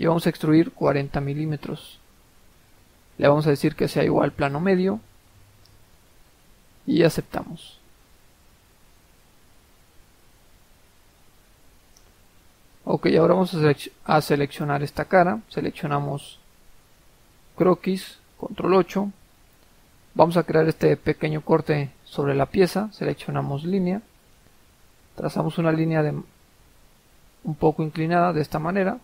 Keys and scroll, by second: 0.9-1.3 typing, 18.7 ctrl+8.